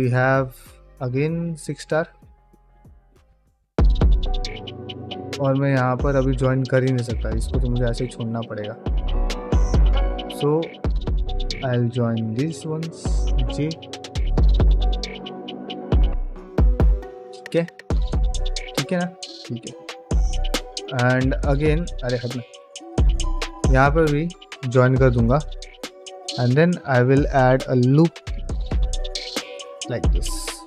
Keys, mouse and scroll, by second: 0.1-1.8 middle drag, 2.3 ctrl+z, 3.2 ctrl+z, 4.9 middle click, 6.0 click, 6.3 g, 6.9-9.6 middle drag, 10.1 click, 10.5 shift+click, 13.2 j, 13.8-14.9 middle drag, 15.2-18.9 middle drag, 22.3 middle click, 23.2 click, 23.8 shift+click, 24.8 j, 25.6 shift+middle click, 26.2 shift+middle click, 27.1 ctrl+r, 29.4 ctrl+middle click, 29.8 middle click.